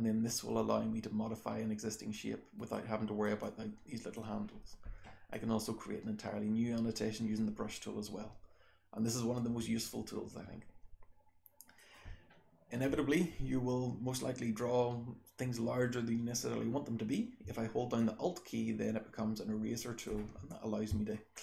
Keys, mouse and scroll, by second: 0.9-2.2 scroll down 1, 2.2-3.2 scroll down 1, 2.5 right click, 3.4 click, 5.3-11.7 drag, 5.3-6.2 scroll down 1, 6.2-7.6 scroll down 1, 7.6-8.9 scroll down 1, 12.9-14.2 scroll down 1, 14.2-15.6 scroll down 1, 15.6-16.9 scroll down 1, 16.9-17.4 scroll down 1, 17.9-20.0 alt+drag.